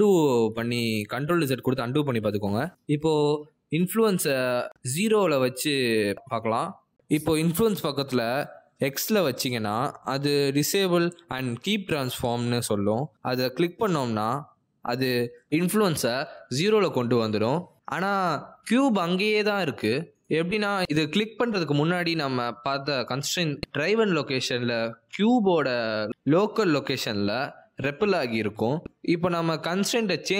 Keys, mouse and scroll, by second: 0.4 middle click, 2.2 ctrl+z, 2.7 middle click, 4.7 middle click, 5.8 click, 10.4 click, 17.6 click, 22.5 middle click, 23.7 middle click, 24.7 middle click, 27.0 middle click.